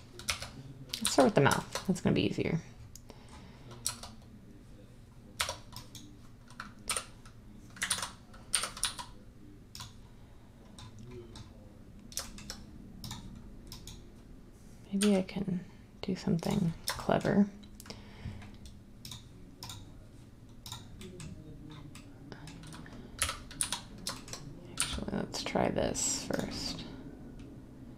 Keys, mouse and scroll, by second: 0.2-1.0 typing, 3.8 Tab, 5.3 Tab, 6.8 h, 7.8 ctrl+z, 8.4-8.8 typing, 15.0 g, 23.1-23.5 typing, 24.7 e.